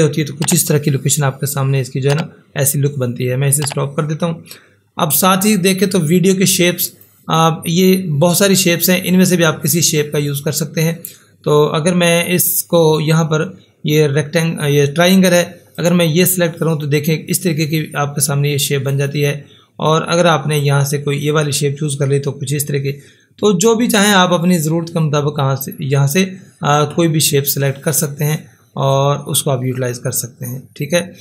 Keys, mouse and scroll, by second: 3.5 click, 3.6 click, 6.9 click, 15.8 click, 18.9 click, 18.9 click, 23.5 click, 23.8 click, 28.9 click.